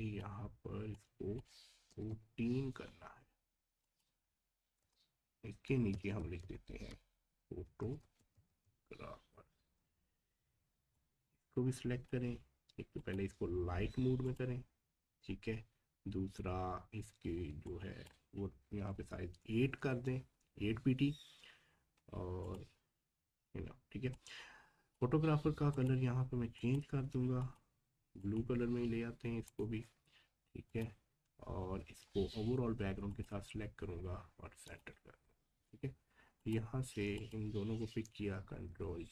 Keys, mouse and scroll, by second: 3.8 click, 4.8 Return, 5.9 typing, 8.0 typing, 9.3 typing, 11.0-13.0 drag, 17.6-20.4 drag, 22.4-25.7 drag, 32.0-32.6 scroll down 1, 33.1 ctrl+click, 35.7-36.4 scroll up 1, 36.4 click, 37.2 shift+click, 38.6 ctrl+g.